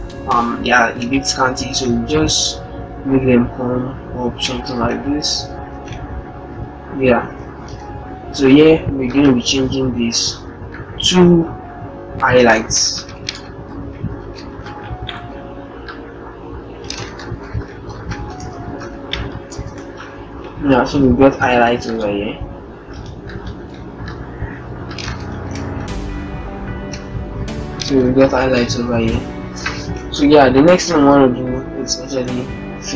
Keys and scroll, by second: 7.2 ctrl+Return, 12.5 shift+h, 16.7 shift+h, 19.2 ctrl+shift+Return, 26.4 ctrl+shift+Up, 28.1 Up, 31.4 alt+Tab, 32.8 Tab.